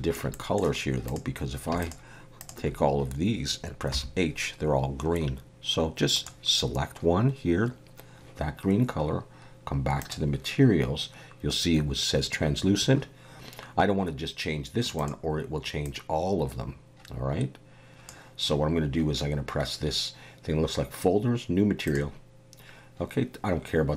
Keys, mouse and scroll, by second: 0.3 middle click, 1.0 click, 1.8 shift+click, 2.4 shift+click, 3.9 h, 6.1 click, 10.0 click, 15.0 click, 21.9 click.